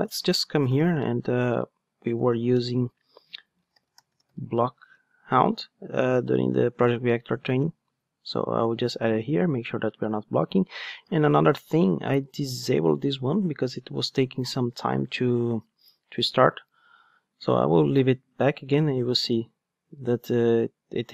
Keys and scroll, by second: 1.2 Tab, 1.5 Return, 5.3 Return.